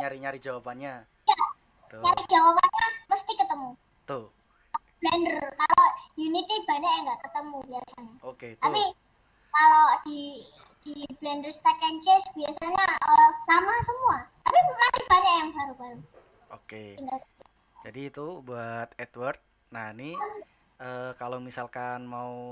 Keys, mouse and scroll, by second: 11.7 click, 12.2-15.4 middle drag.